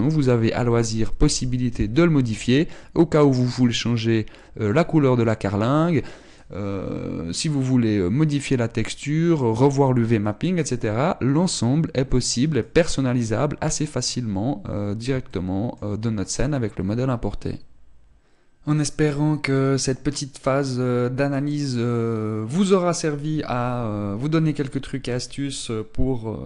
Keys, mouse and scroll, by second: 13.3 click, 16.0 shift+middle click.